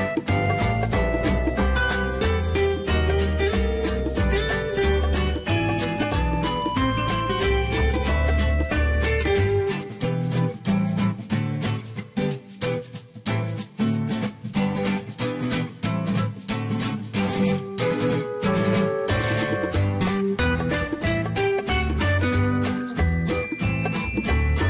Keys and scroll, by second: 11.4 Escape, 16.4 2.